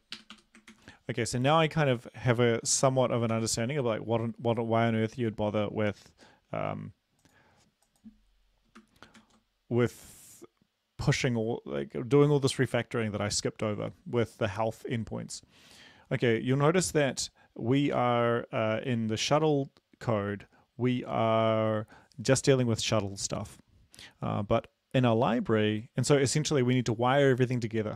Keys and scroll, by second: 0.0-0.4 typing, 0.8 ctrl+s, 2.8 ), 3.1 Right, 3.4 ctrl+s, 9.2 ctrl+s.